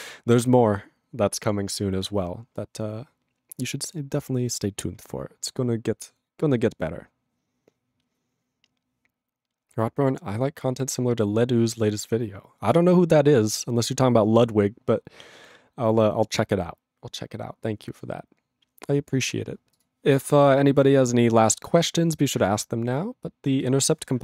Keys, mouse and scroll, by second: 19.8 click.